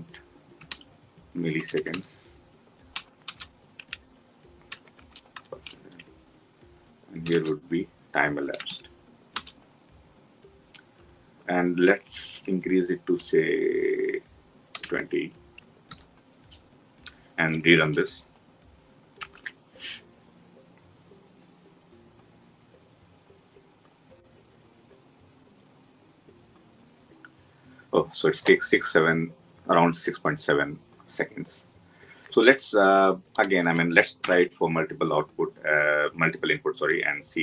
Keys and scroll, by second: 9.2 Return, 15.8 ctrl+s, 19.0 ctrl+shift+F10.